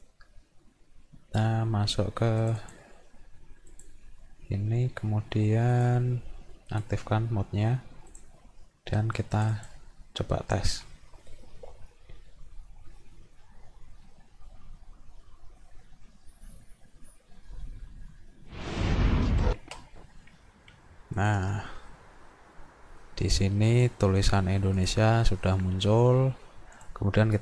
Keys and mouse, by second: 2.4 click, 3.7 click, 5.8 click, 6.7 click, 8.1 click, 9.4 click, 9.6 click, 21.2 click, 23.7 click, 24.8 click, 26.8 click.